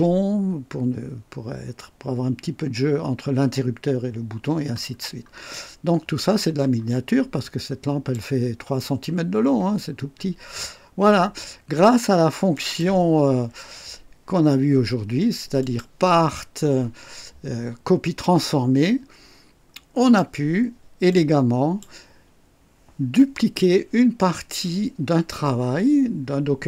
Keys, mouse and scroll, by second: 4.9-5.2 scroll down 2, 5.5-6.5 drag, 6.7-7.1 scroll down 1, 7.4 click, 9.8 scroll up 1, 12.5 click, 15.6 click, 19.9 click, 21.1 click.